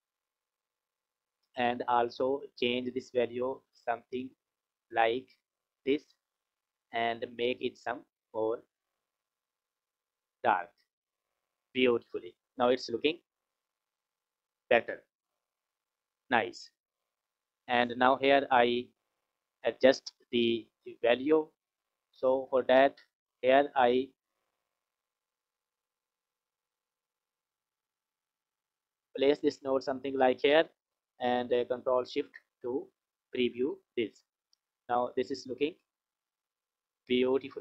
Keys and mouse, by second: 1.0 click, 11.4 click, 13.3-14.3 drag, 17.2-19.0 drag, 20.3-22.9 drag, 24.3 click, 24.5-26.0 drag, 27.4 F6, 28.6 click, 28.8 click, 29.8 click, 32.0 ctrl+shift+click, 35.4 click, 36.4 click.